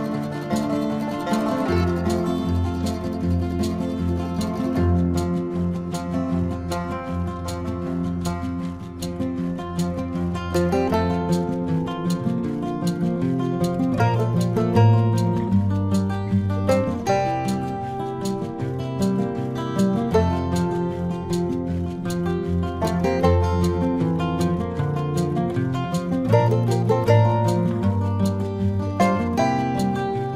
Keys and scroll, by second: 0.3 ctrl+alt+z, 3.6 space, 6.3 space, 6.8 ctrl+alt+z, 7.7 ctrl+alt+z, 8.7 space, 12.0 space, 17.0 ctrl+alt+z, 18.4 ctrl+=, 22.9 ctrl+=.